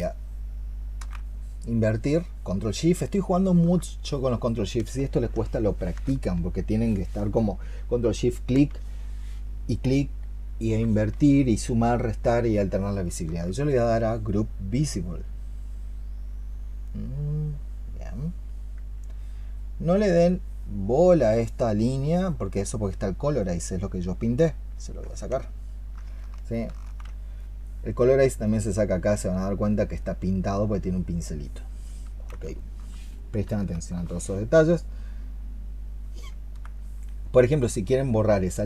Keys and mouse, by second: 3.2 alt+click, 12.9 alt+click, 26.4 ctrl+shift+click, 32.4 alt+click, 33.3 alt+click, 33.8 alt+click, 36.6 alt+click.